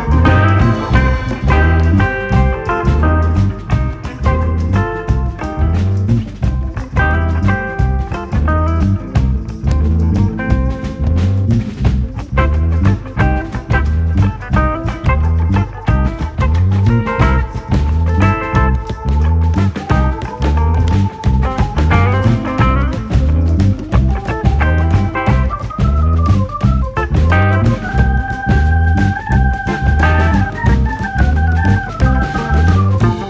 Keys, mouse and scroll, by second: 0.1-0.5 drag, 0.5 shift+middle drag, 0.8-1.1 scroll up 2, 1.1-2.2 shift+middle drag, 3.8 click, 6.9 click, 7.0-7.4 scroll up 2, 9.1 click, 10.1 n, 10.9 click, 11.1 n, 13.3 click, 13.8-16.5 scroll up 3, 16.5-17.6 scroll up 1, 17.6-18.3 scroll up 1, 18.3-19.1 scroll up 1, 19.1 click, 22.7-24.0 drag, 25.2-26.7 drag, 26.7-27.0 scroll up 7, 27.0-27.3 scroll down 1, 27.3 click, 27.5 KP_Decimal, 27.7 scroll up 1, 27.9-28.5 shift+middle drag, 28.5 scroll up 1, 28.7-30.1 shift+middle drag, 30.1 click, 30.3 scroll down 1, 30.4-31.2 shift+middle drag, 31.6-33.1 drag, 33.1 s.